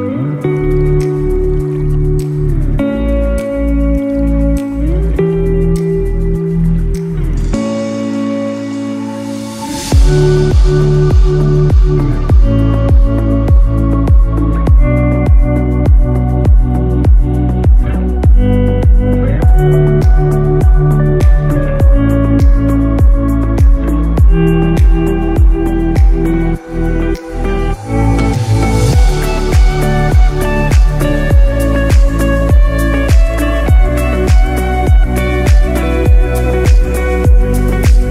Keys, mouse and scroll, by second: 1.7 ctrl+z, 2.0-3.2 scroll up 1, 3.2 middle click, 3.2-3.7 scroll down 1, 3.7 i, 9.0 middle click, 11.5 shift+middle click, 12.1-12.4 scroll up 2, 12.4 middle click, 13.6 g, 18.7-19.0 scroll down 1, 19.0 middle click, 19.7 s, 22.6 g, 26.8 s, 28.6 middle click, 29.5 scroll down 1, 30.1 middle click, 30.1 scroll down 2, 30.9 scroll up 4, 31.4 middle click, 32.0 shift+scroll up 1, 32.1 shift+middle click, 32.7 middle click, 33.6 scroll down 2, 34.8 ctrl+r, 36.8-37.1 scroll up 4, 37.3 middle click, 38.0 scroll down 2.